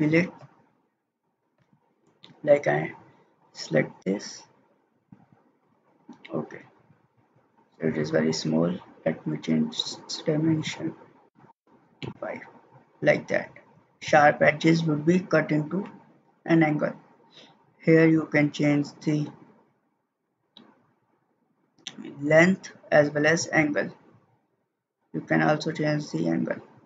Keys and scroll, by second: 11.2 5, 11.5 Return.